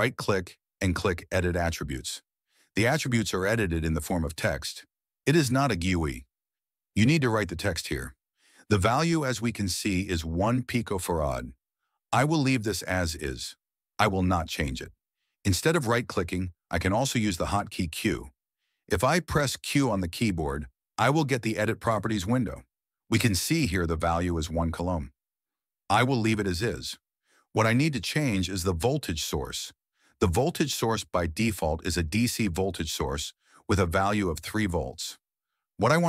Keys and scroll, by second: 15.9 q, 22.4 q, 29.7 q.